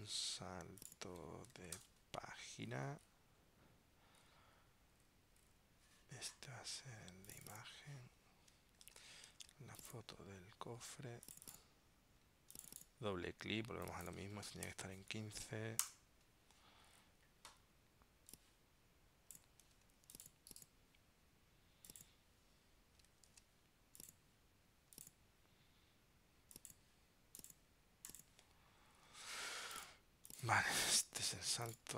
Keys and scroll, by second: 1.9 super+Return, 9.0 super+Tab, 19.8 super+x, 23.4 super+v.